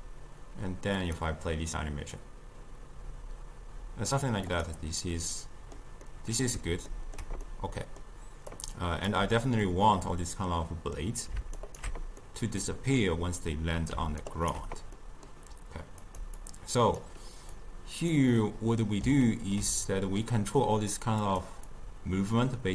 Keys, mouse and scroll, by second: 4.6 click, 5.4-8.6 middle drag, 8.6 click, 9.7-11.7 middle drag, 11.7 ctrl+alt+right click, 12.3-14.3 middle drag, 14.3 ctrl+alt+right click, 15.0-16.1 middle drag, 16.1 click, 16.4-17.7 drag, 18.5-21.3 middle drag, 21.3 click, 21.8-22.7 drag.